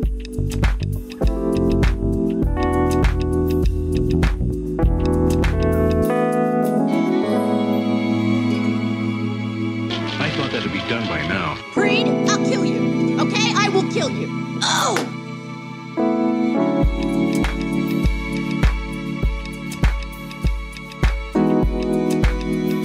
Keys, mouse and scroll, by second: 2.1-2.7 shift+middle drag, 3.9 g, 4.2 z, 8.3 click, 8.9 g, 9.0 y, 10.5 click, 11.0 click, 11.2-12.2 middle drag, 13.5 shift+click, 14.0 g, 14.4 z, 15.8 click, 16.4 click, 17.5 click, 18.0-19.3 typing, 19.3 click, 19.8 click, 21.1 click, 21.6 click, 22.2 click, 22.7 g.